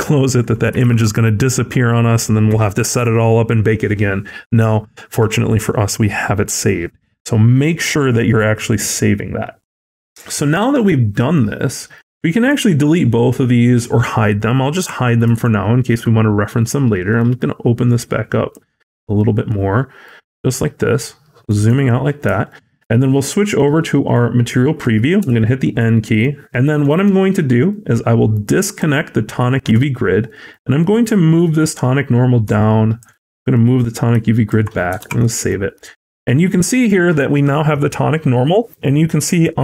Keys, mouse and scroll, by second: 19.2 click, 19.2 h, 19.3 click, 20.1-20.7 scroll down 3, 21.4 middle click, 21.4 scroll down 6, 21.6 scroll up 1, 22.3 shift+middle click, 22.3 scroll up 3, 23.6 click, 25.1 n, 25.9 middle click, 26.3-26.8 scroll down 5, 26.7 middle click, 27.1-27.9 scroll up 2, 27.3 middle click, 28.2 click, 29.6 scroll down 1, 30.1 middle click, 30.1-30.9 scroll down 4, 30.9 click, 34.9 ctrl+s, 35.3 middle click, 35.8 scroll up 1, 36.4 scroll up 4, 36.4 middle click.